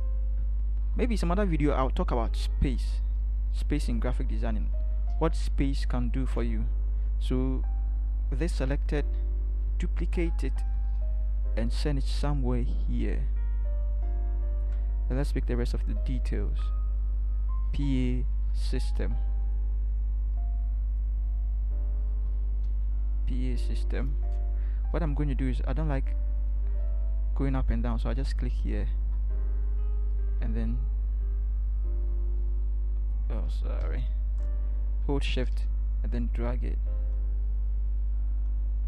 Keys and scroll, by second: 4.5 Down, 10.1 ctrl+j, 18.3 ctrl+c, 22.6 ctrl+v, 33.8 ctrl+z.